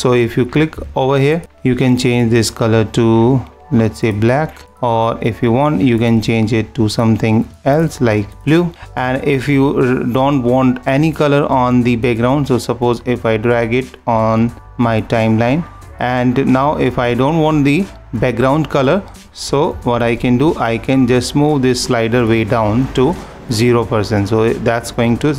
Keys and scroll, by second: 1.3 super+=.